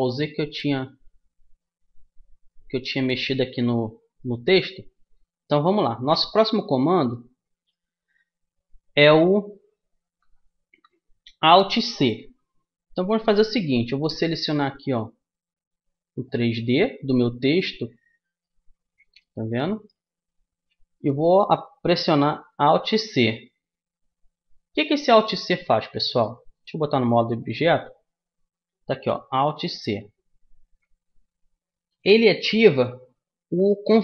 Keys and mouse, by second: 3.5-6.0 right drag, 8.2 Tab, 14.2 b, 22.8 alt+c, 24.7-26.4 drag, 26.6 Tab, 29.5 alt+c.